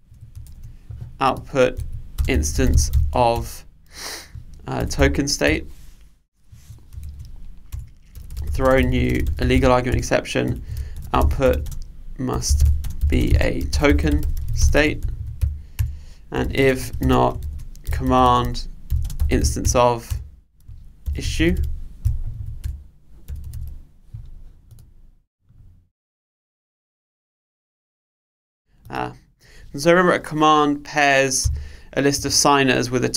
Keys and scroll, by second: 3.4 Return, 10.0 Return, 20.1 Return.